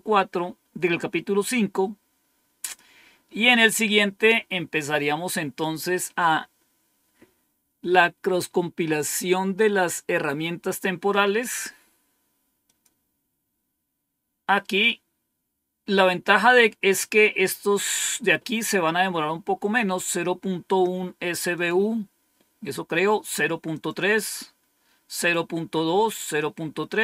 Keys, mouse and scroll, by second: 2.5 click, 12.6 click, 13.3 click, 21.4 click, 23.6 click, 25.0 click, 26.0 click, 26.6 click.